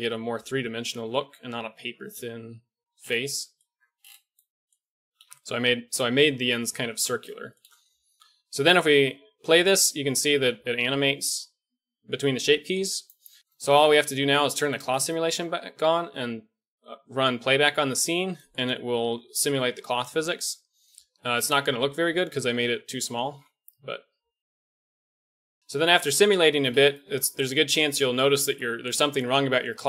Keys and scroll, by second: 3.6 Tab, 5.2 KP_1, 20.9 alt+a, 21.2 Escape, 21.8 alt+a, 25.2 alt+a, 25.5 KP_1.